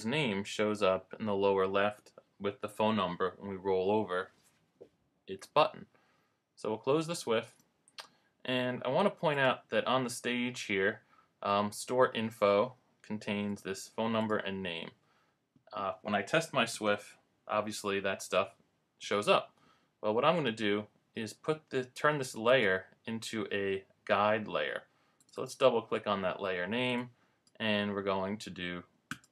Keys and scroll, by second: 16.8 super+Return.